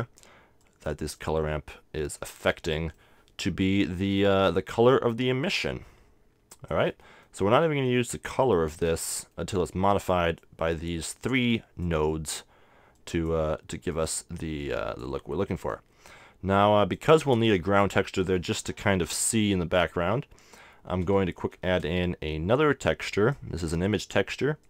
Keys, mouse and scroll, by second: 2.4 middle click, 2.8-4.2 middle drag, 4.2-7.5 drag, 7.1 middle click, 8.3-10.1 drag, 10.4-15.7 drag, 12.1-13.9 middle drag, 15.5-17.3 middle drag, 16.6-18.4 drag, 21.5 shift+a, 24.1 click.